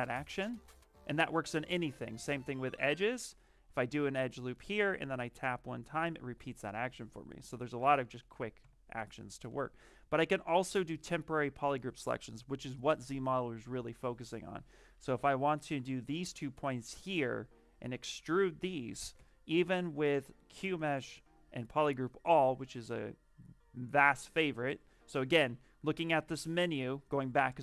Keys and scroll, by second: 7.4 ctrl+z, 7.7 ctrl+z, 8.1 ctrl+z, 8.5 ctrl+z, 19.0 space, 26.1 space.